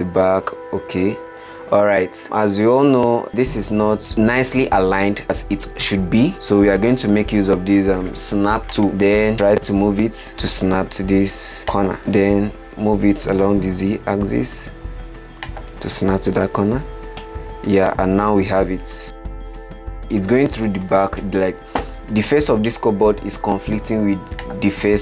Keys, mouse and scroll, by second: 2.1-2.6 scroll up 6, 2.6-3.5 middle drag, 3.5-4.1 scroll up 5, 4.1-4.4 middle drag, 4.4-5.2 scroll up 9, 8.9 click, 10.3 g, 12.0-13.1 scroll up 5, 13.1 g, 17.5-24.7 middle drag, 24.7 click.